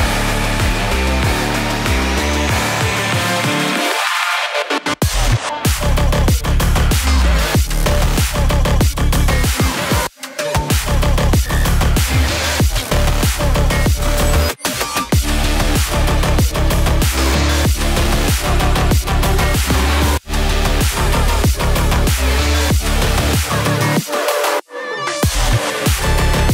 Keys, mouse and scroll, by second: 3.3 click, 7.7 click, 9.1-9.9 typing, 10.3 Return, 12.8 click, 13.9 typing, 17.0-17.8 typing, 19.5 click, 20.3-20.7 typing, 22.0 typing, 22.2 click, 25.1-26.5 drag.